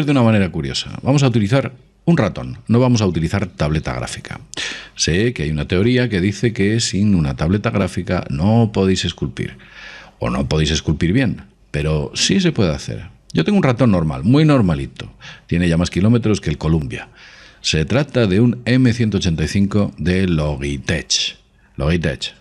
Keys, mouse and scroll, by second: 4.6-6.4 middle drag, 19.4-22.4 middle drag.